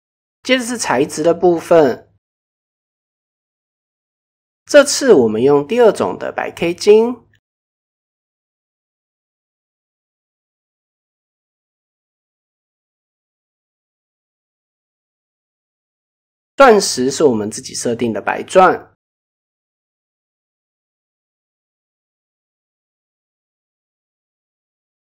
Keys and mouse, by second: 1.6-1.9 shift+middle drag, 2.5 right click, 7.9 right click, 10.0 click, 14.8 middle click, 17.2 KP_0, 18.5 click, 18.8-19.2 middle drag, 19.6-19.9 middle drag, 20.1 click, 20.9-21.9 drag, 22.8-23.8 drag, 24.3 middle click.